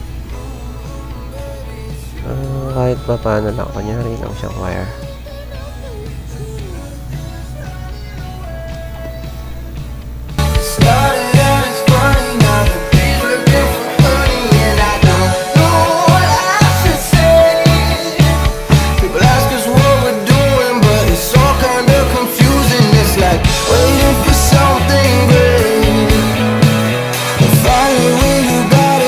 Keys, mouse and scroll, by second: 0.1 click, 1.5 click, 2.0 ctrl+z, 2.8 click, 4.8 click, 6.1 click, 6.8 click, 7.9 click, 10.1 click, 11.3 click, 12.3 click, 16.3 click, 17.3 click, 17.9 click, 18.8 click, 19.5 click, 20.8 click, 21.9-23.1 drag, 24.5 click, 25.8 click, 26.1 click, 28.1 click.